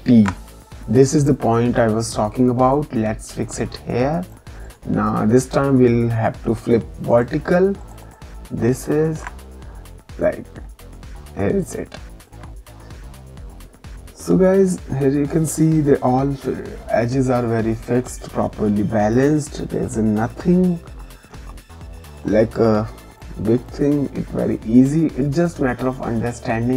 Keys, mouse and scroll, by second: 2.0 click, 4.6 right click, 7.1 click, 9.1 ctrl+e, 11.8 ctrl+click, 20.3 g, 22.0 alt+click, 23.1 click.